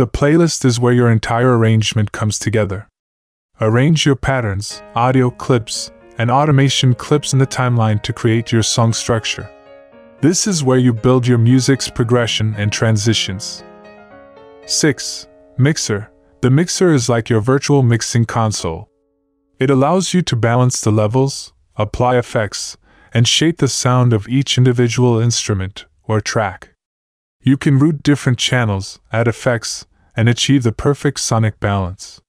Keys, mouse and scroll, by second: 2.9 click, 5.6 click, 20.3 click, 21.1 click, 22.5-24.9 drag, 23.5 !, 25.4 click, 25.6-26.0 drag, 28.7 drag.